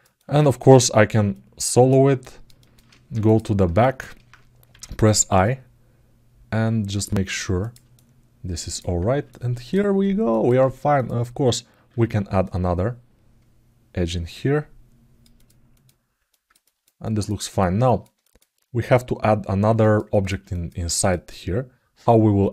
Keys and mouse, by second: 0.0 ctrl+alt+middle click, 1.1 alt+middle click, 2.0 alt+middle click, 2.3 ctrl+alt+middle click, 3.0 click, 3.5 alt+shift+middle click, 7.7 alt+middle click, 8.3 alt+click, 9.0 alt+middle click, 10.0 alt+middle click, 15.5 click, 16.0 ctrl+alt+middle click, 16.8 alt+middle click, 17.2 alt+shift+middle click, 17.6 ctrl+alt+middle click, 18.0 alt+shift+middle click, 19.5 ctrl+alt+middle click, 19.8 ctrl+alt+middle click, 20.3 alt+shift+middle click.